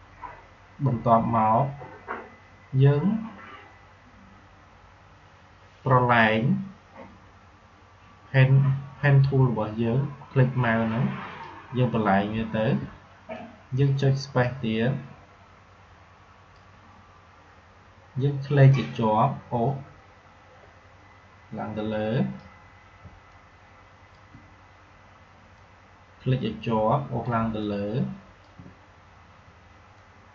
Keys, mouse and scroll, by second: 12.7 space, 13.3 click, 13.4 space, 15.7 space, 18.6 click, 18.7-22.9 drag, 22.9 space, 23.3 click, 23.4 space, 25.5-27.3 drag, 27.3 space, 27.5 click, 27.7 space, 28.5 space, 29.9 click, 29.9-30.3 drag.